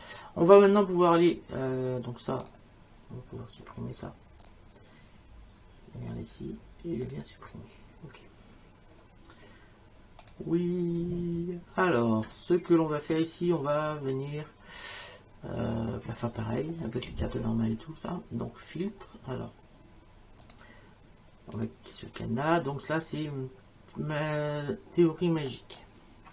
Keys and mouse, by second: 1.2 click, 2.5 click, 4.4 click, 7.1 click, 10.2 click, 20.4 click, 21.6 click.